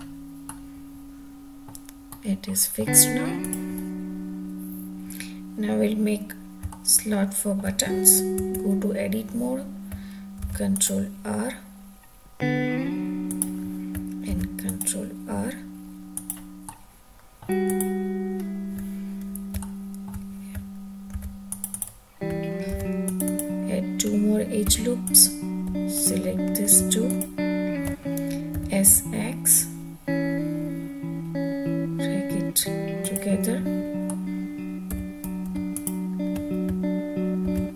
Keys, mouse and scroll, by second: 1.9-2.4 middle drag, 3.2 click, 6.7-7.6 middle drag, 8.4 Tab, 10.4 ctrl+r, 13.3 click, 14.4 ctrl+r, 16.2 click, 16.7 middle click, 17.6 click, 19.6 shift+middle click, 21.1 ctrl+r, 21.7 click, 22.7 ctrl+r, 23.3 click, 24.0-24.7 scroll up 2, 24.9 2, 25.0 click, 26.0 alt+click, 27.0 alt+shift+click, 28.5 s, 28.9 x, 33.0 click, 34.0 middle click, 34.4 Tab, 34.4 scroll up 1, 34.9 2, 35.7 alt+click, 37.4 ctrl+x.